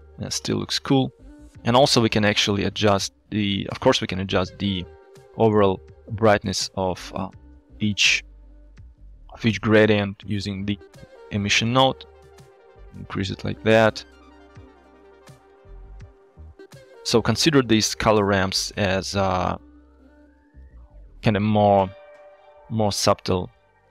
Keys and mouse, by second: 1.4 shift+click, 2.6 middle click, 3.9 shift+click, 4.9 click, 7.3 middle click, 11.2 click, 12.2-16.5 shift+drag, 17.1 shift+click, 18.3 click, 19.1 click, 19.5 click, 20.1 click, 21.0 middle click, 22.9 shift+click, 23.7 shift+click.